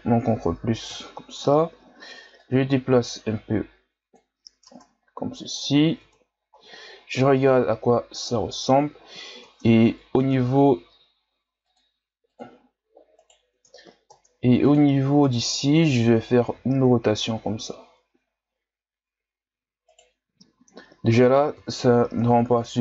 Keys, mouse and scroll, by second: 0.9 KP_1, 2.4-4.6 drag, 4.6 ctrl+Tab, 6.0 Tab, 6.6 scroll down 1, 8.3-9.6 scroll up 5, 9.6 ctrl+Tab, 10.2 Tab, 11.6-13.1 drag, 13.1 right click, 13.6 Tab, 15.2 right click, 16.5 r, 20.6-21.5 scroll up 1, 21.5 KP_3, 22.4-22.8 ctrl+scroll down 2.